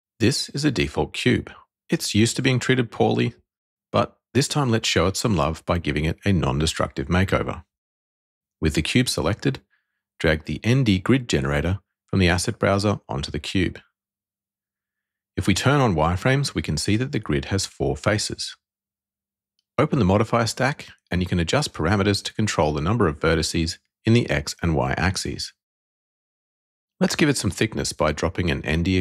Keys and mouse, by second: 9.5 click, 14.7 alt+v, 18.9 click, 20.6 click, 21.4 click, 27.3 click.